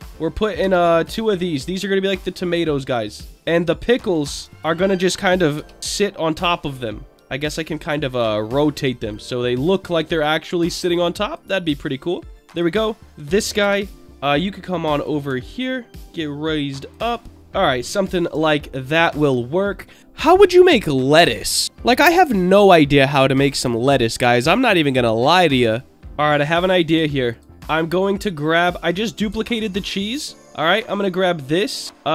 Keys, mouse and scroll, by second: 0.6 shift+d, 0.9 click, 1.3 middle click, 2.4 click, 3.2 click, 3.9 Tab, 4.4 Tab, 4.5 click, 5.5 l, 5.9 l, 6.3 l, 7.1 middle click, 7.6 click, 8.7 r, 9.1 click, 9.8 click, 10.8 click, 11.6 middle click, 12.5 click, 13.6 l, 14.2 click, 15.6 alt+middle click, 16.0 click, 17.2 middle click, 17.5 middle click, 18.3 Tab, 26.0 click, 27.3 alt+click, 28.6 click, 29.6 alt+click, 30.8 click.